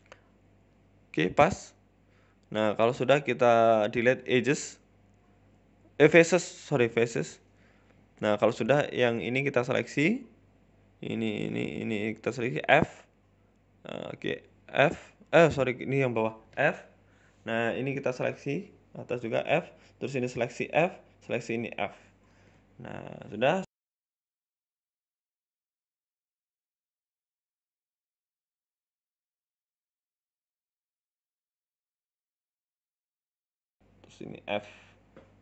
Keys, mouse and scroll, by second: 1.2 middle click, 2.3-2.6 scroll down 1, 2.6 Delete, 3.4 middle click, 4.1 scroll up 2, 4.3 middle click, 5.3 click, 5.6 middle click, 6.2 middle click, 7.1 click, 7.3 middle click, 8.5 right click, 8.6 middle click, 9.7 right click, 10.0 alt+shift+right click, 10.6 shift+right click, 11.2 middle click, 11.8 shift+right click, 11.9 middle click, 12.8 shift+right click, 13.0 middle click, 13.7 f, 14.2 ctrl+z, 14.4 middle click, 15.4 shift+right click, 16.1 f, 16.3 middle click, 17.0 right click, 17.4 right click, 17.7 shift+right click, 18.0 shift+right click, 18.9 f, 19.5 right click, 19.7 alt+shift+right click, 20.4 f, 20.8 right click, 21.1 alt+shift+right click, 21.8 f, 21.9 middle click, 22.3 scroll down 3, 22.4 Tab, 22.6 middle click, 23.0 scroll up 3, 23.2 middle click, 23.4 Tab, 24.1 shift+middle click, 24.1-24.5 scroll up 1, 24.5 right click, 24.9 shift+right click, 25.4 ctrl+z, 25.6 shift+right click, 25.7 middle click, 26.4 shift+right click, 26.8 f, 27.4 right click, 27.7 right click, 28.0 shift+right click, 28.1 shift+right click, 28.2 shift+middle click, 28.6 shift+right click, 28.8 middle click, 29.2 shift+right click, 29.6 f, 30.1 right click, 30.3 alt+shift+right click, 31.1 middle click, 31.8 ctrl+z, 32.2 right click, 32.5 alt+shift+right click, 33.0 f, 33.2 middle click, 33.8 alt+shift+Right, 33.8 right click, 34.0 alt+shift+Right, 34.4 f, 34.5 scroll down 4, 34.6 Tab, 34.7 middle click.